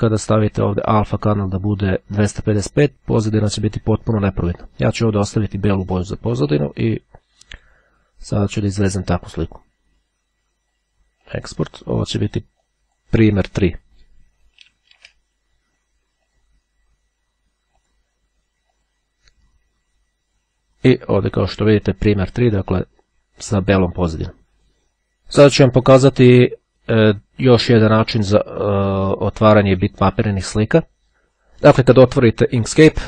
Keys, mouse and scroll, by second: 0.9-2.5 drag, 6.9 click, 8.4 click, 11.1 click, 12.8 click, 13.7 click, 14.4 Delete, 15.2 3, 16.4 click, 17.9 click, 18.7 click, 21.1 click.